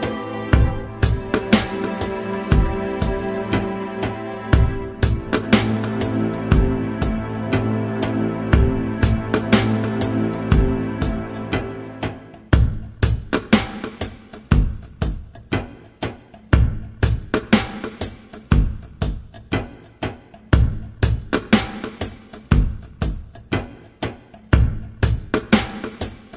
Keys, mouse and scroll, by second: 0.5 Down, 4.1 Down, 7.7 Down, 12.9 Down, 15.7-17.0 drag, 18.5 click, 20.0 Left, 21.0 Down, 21.3 Left, 24.7 alt+".